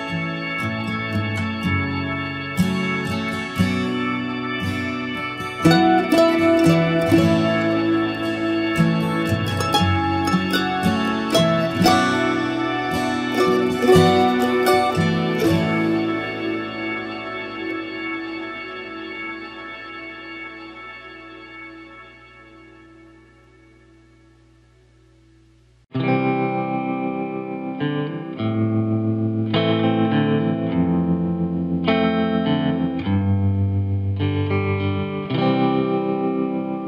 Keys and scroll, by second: 8.4 Down, 17.6 Right.